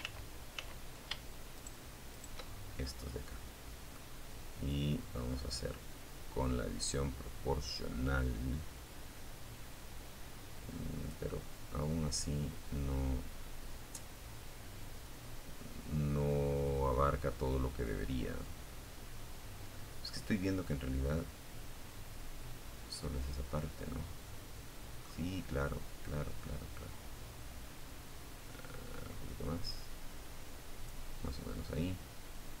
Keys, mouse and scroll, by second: 0.3 shift+right click, 0.7 shift+middle click, 1.0-2.2 middle drag, 2.9-3.9 drag, 3.9-4.3 scroll down 1, 5.1 scroll down 1, 6.1 scroll down 1, 6.9-7.5 scroll up 2, 9.5-23.4 middle drag, 24.2 click, 25.1 scroll down 1, 26.7 scroll down 2, 27.6 scroll down 2, 29.4-32.6 middle drag.